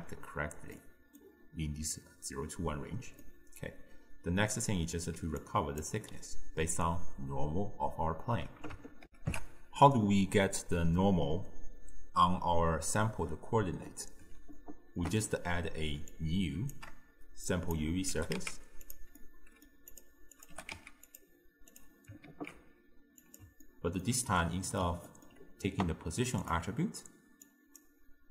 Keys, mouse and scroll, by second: 0.8-5.2 middle drag, 5.2 d, 5.5-5.9 drag, 5.9 d, 9.1 ctrl+alt+shift+w, 14.6-16.2 ctrl+middle drag, 16.2 click, 17.5 shift+click, 18.2 g, 19.2 middle click, 20.0 click, 20.4 click, 20.6 g, 21.8 click, 22.3 ctrl+shift+d, 23.7-26.5 ctrl+middle drag, 26.5 click, 27.5 drag.